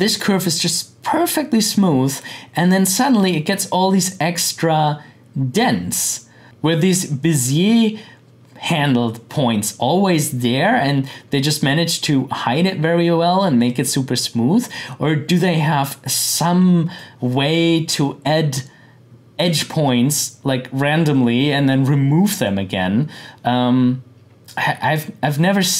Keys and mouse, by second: 2.9-6.4 drag, 13.5-19.4 drag.